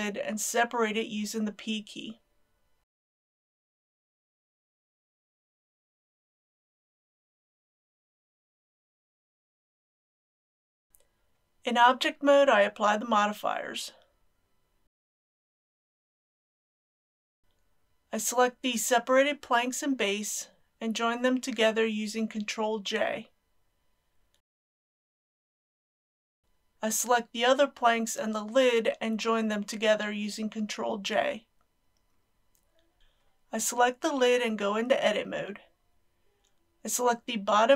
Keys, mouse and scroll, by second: 1.3 Tab, 2.8 alt+click, 3.9 alt+shift+click, 5.2-6.8 middle drag, 7.3 p, 9.1 click, 9.7 ctrl+z, 10.9 Return, 13.0 click, 13.6 ctrl+a, 14.0 ctrl+a, 14.6 click, 15.5 ctrl+a, 16.1 click, 16.9 ctrl+a, 17.1 ctrl+a, 17.4 click, 21.4 shift+click, 23.5 ctrl+j, 33.0 click, 34.2 Tab, 35.6 2, 36.3 scroll up 1, 36.8 middle click.